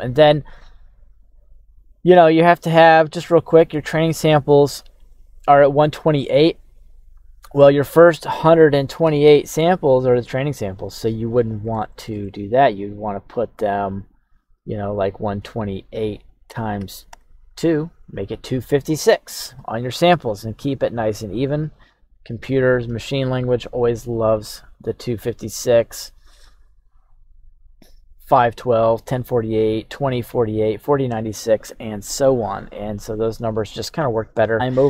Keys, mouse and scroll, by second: 0.0-1.1 drag, 1.9-2.9 scroll down 1, 6.6-17.1 drag, 11.8 BackSpace, 11.9 BackSpace, 34.0-34.5 scroll up 1, 34.5 scroll down 1.